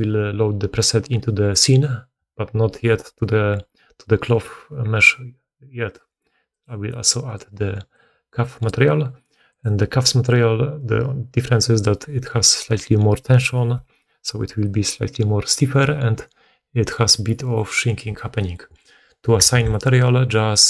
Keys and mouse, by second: 9.6-18.6 middle drag, 18.6 right click, 18.7-20.5 middle drag, 19.5 alt+a, 20.5 drag.